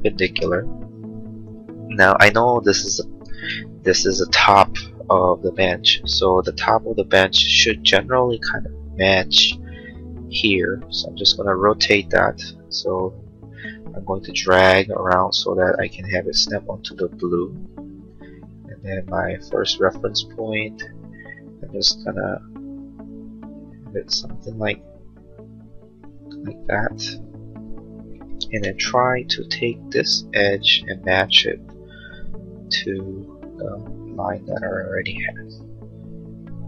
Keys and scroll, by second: 3.3 space, 28.6 m.